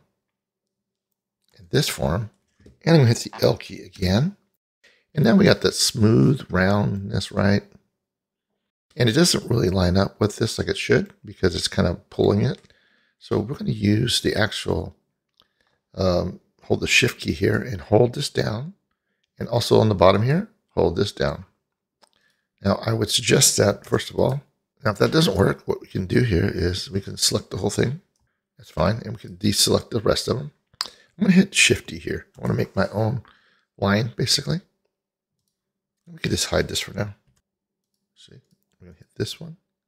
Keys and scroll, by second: 4.0 l, 23.9 ctrl+z, 32.4 shift+d.